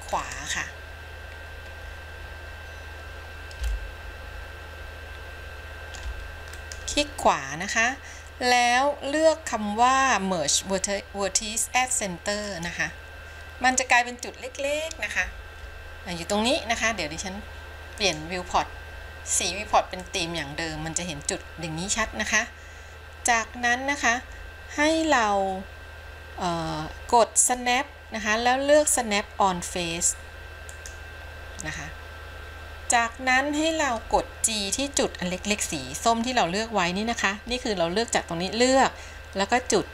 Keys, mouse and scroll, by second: 0.3-2.7 right drag, 3.9-7.1 shift+middle drag, 7.4-13.0 right drag, 18.2-21.6 drag, 27.8-28.4 drag, 29.6-32.4 drag.